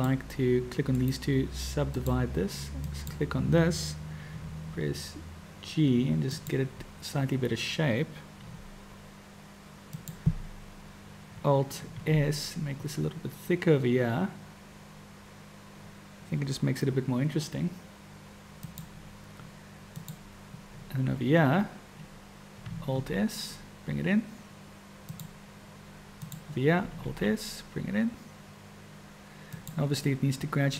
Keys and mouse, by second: 1.0-2.2 right drag, 2.9 click, 4.3 g, 8.5 g, 12.0 alt+s, 20.0 click, 23.0 alt+s, 26.1 click, 27.1 alt+s.